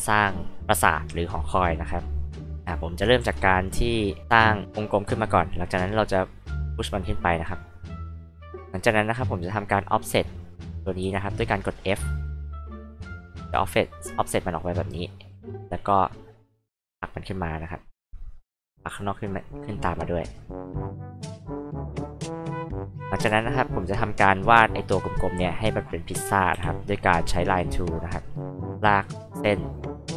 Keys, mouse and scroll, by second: 2.5 h, 2.7 click, 3.2 c, 3.5 click, 5.0 p, 6.0-8.5 drag, 11.0 f, 12.2-14.9 drag, 16.5 p, 17.4 click, 18.5-19.6 drag, 19.9 click, 20.8-22.0 drag, 23.2 h, 23.4 click, 26.5 l, 28.1 click, 28.5 click, 28.8 click.